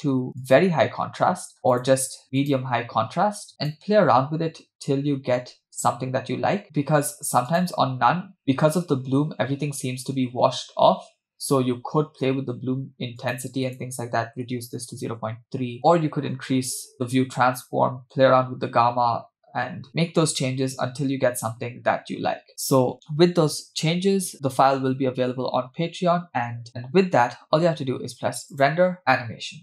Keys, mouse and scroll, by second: 1.7-2.9 drag, 3.5 click, 5.7 scroll up 1, 6.3 scroll down 1, 6.6-7.9 drag, 11.7-13.2 scroll up 5, 13.2-15.1 drag, 16.0-16.6 scroll down 1, 16.6 scroll down 2, 17.2-19.8 scroll down 3, 21.8-22.5 scroll up 4, 22.5-23.1 scroll up 3, 28.5-29.6 drag.